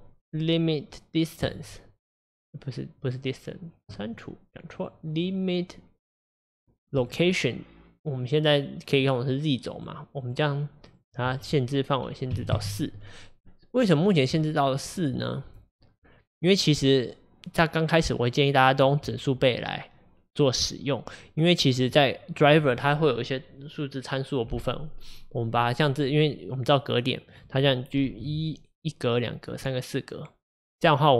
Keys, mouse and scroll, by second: 1.5 click, 4.0 click, 7.1 click, 9.8 click, 10.2 click, 12.5 click, 13.4-13.8 scroll down 2, 14.0-14.5 scroll down 2, 14.5-27.4 shift+middle drag, 27.4 click, 28.0 g.